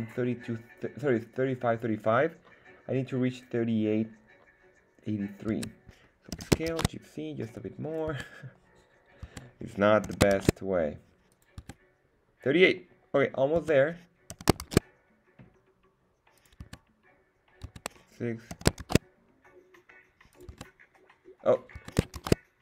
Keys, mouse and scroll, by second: 5.5 Tab, 6.3 s, 6.7 shift+z, 7.9 click, 8.1 Tab, 9.2 Tab, 10.0 s, 10.3 shift+z, 11.3 click, 11.6 Tab, 13.5 Tab, 14.3 s, 14.6 shift+z, 16.3 click, 16.6 Tab, 17.6 Tab, 18.5 s, 18.8 shift+z, 20.3 click, 20.5 Tab, 21.7 Tab.